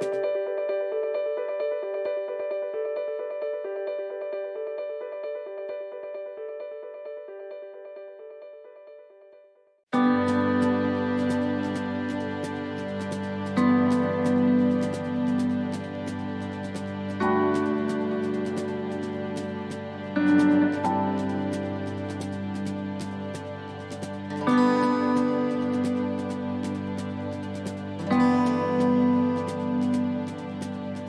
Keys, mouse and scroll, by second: 2.0 click, 3.5 s, 7.0 click, 7.0-7.7 scroll down 7, 7.7 middle click, 8.8-9.8 scroll up 8, 10.0 middle click, 11.1 ctrl+r, 16.6 middle click, 17.4 ctrl+r.